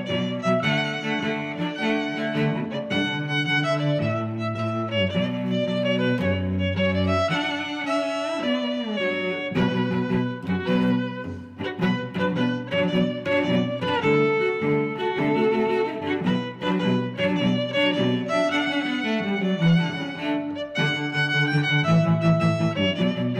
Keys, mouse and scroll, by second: 13.8 middle click, 14.8 click, 16.8 middle click, 17.7 middle click, 18.2 click, 20.2 middle click, 20.7 click, 22.8 middle click.